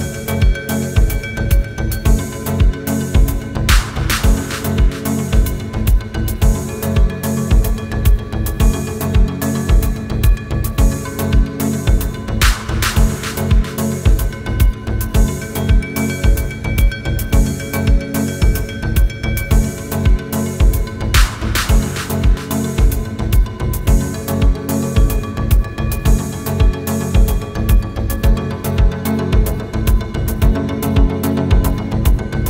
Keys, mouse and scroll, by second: 0.2 click, 2.8 ctrl+space, 3.1-3.6 ctrl+click, 3.2 ctrl+space, 4.8-9.3 drag, 11.9 ctrl+space, 12.1-12.7 ctrl+click, 12.4 ctrl+space, 14.5-16.4 alt+drag, 21.4 space, 21.4-22.3 click, 21.8 space, 27.9 click, 28.9 ctrl+j, 31.4 shift+Right.